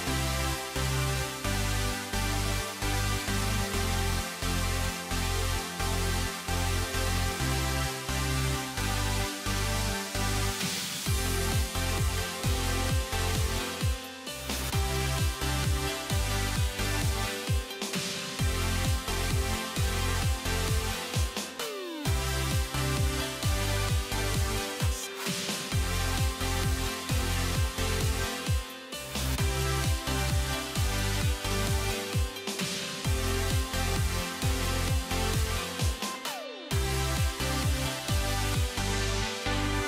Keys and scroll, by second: 36.8 alt+x.